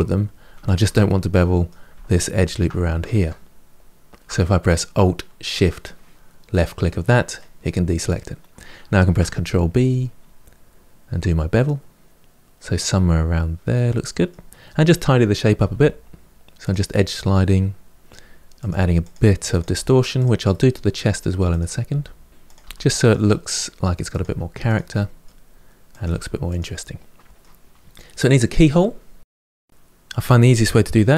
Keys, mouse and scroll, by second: 0.4 shift+click, 0.8-1.9 middle drag, 1.9 alt+click, 2.8 ctrl+z, 3.9 alt+shift+click, 6.3-8.9 middle drag, 8.9 ctrl+b, 12.2-14.5 middle drag, 14.5 click, 15.2 g, 16.3 middle click, 17.1 1, 17.4 click, 17.6 g, 18.2 middle click, 19.0 click, 19.1 g, 19.7 click, 19.8 g, 20.5 middle click, 21.3 click, 21.6 g, 22.6 click, 22.7 g, 23.2 middle click, 23.9 click, 23.9 g, 24.5 middle click, 25.3 click, 25.4 g, 25.9-29.7 middle drag.